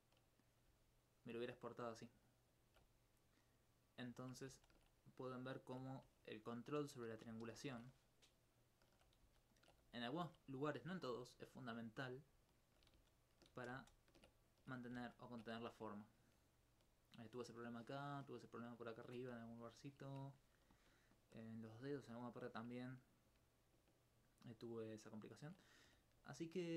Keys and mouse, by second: 0.8 alt+click, 0.9 alt+click, 4.5 ctrl+z, 5.1 alt+click, 7.2 ctrl+shift+z, 7.7 ctrl+shift+z, 9.2 ctrl+z, 9.9 alt+click, 11.1 alt+click, 11.3 alt+click, 12.3 alt+click, 12.9 ctrl+z, 14.5 alt+click, 14.9 ctrl+z, 15.6 alt+click, 15.9 alt+click, 18.2 alt+c, 22.1 alt+click, 26.2 middle click.